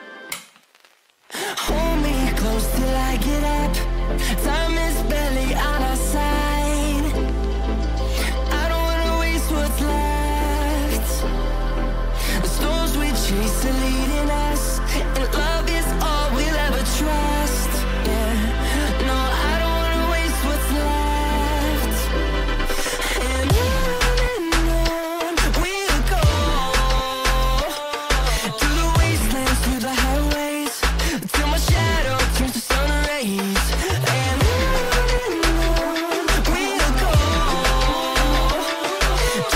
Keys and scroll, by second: 3.4 shift+Page_Up, 3.9 Escape, 12.3 space, 13.7 space, 13.8 F3, 15.5 F3, 17.6 ctrl+g, 23.0 c, 28.9 ctrl+z, 29.2 F3, 33.7 F3, 36.0 F3, 39.0 r.